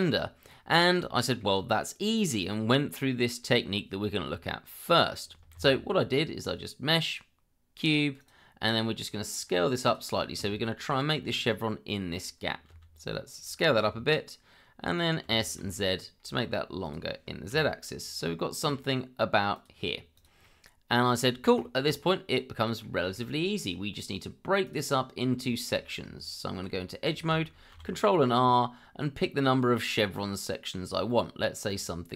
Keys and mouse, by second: 1.2 shift+middle drag, 5.5 shift+a, 9.8 click, 10.6 shift+middle drag, 12.7 s, 13.5 click, 13.8 g, 15.2 s, 15.6 z, 17.5 g, 20.1 click, 20.4-21.2 middle drag, 21.6 shift+middle drag, 22.3-22.8 middle drag, 23.1 shift+middle click, 23.6 click, 24.6 click, 25.5 shift+middle click, 26.0 Tab, 27.7 ctrl+r, 31.7 click.